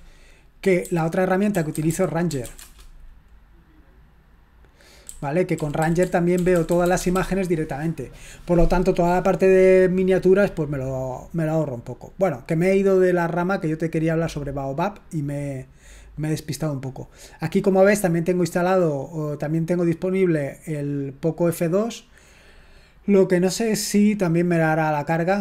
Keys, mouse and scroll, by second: 0.8-2.9 typing, 5.5-6.0 typing, 7.1 j, 12.2 click, 13.8 click, 20.5 click.